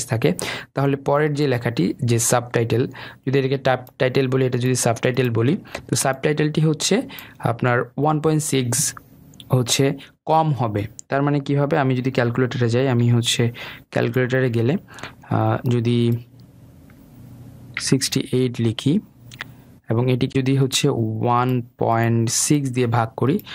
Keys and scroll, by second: 13.6 super+r.